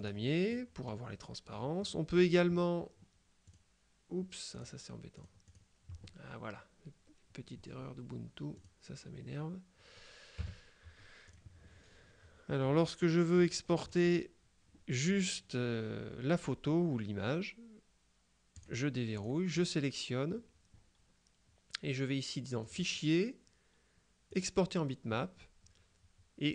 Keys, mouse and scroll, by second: 0.1 click, 1.6 middle click, 3.6 click, 4.6 click, 5.4 click, 8.7 click, 10.5 KP_Subtract, 11.3 click, 13.1 click, 13.8 middle click, 18.7 click, 22.7 click, 24.4 click.